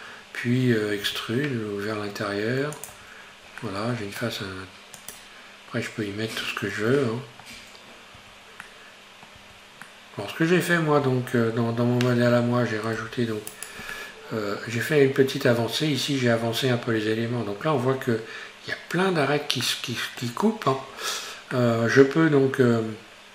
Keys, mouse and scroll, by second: 1.1 e, 2.9 Tab, 3.3-3.7 scroll down 2, 3.7-5.1 middle drag, 5.1 drag, 7.1-8.2 shift+middle drag, 8.2 Tab, 8.6 middle click, 9.4 Tab, 9.9-11.1 middle drag, 11.1 Tab, 13.0 ctrl+r, 14.0-17.9 middle drag, 17.9 scroll up 1, 19.7-22.7 middle drag, 22.7 Tab.